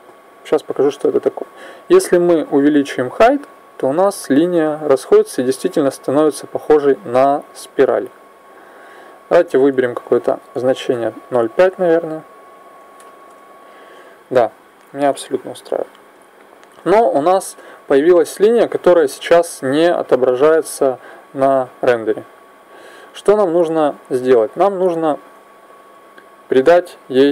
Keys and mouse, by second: 1.9-5.5 drag, 9.5-11.8 drag, 21.4-26.7 drag.